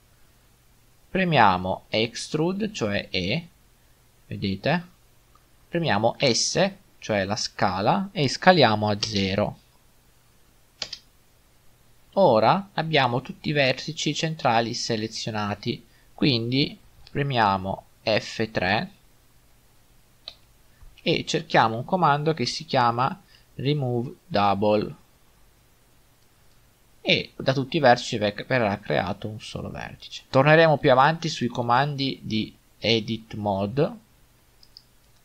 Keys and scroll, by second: 2.6 e, 6.3 s, 9.1 0, 12.2 typing, 20.3 F3, 22.7 typing.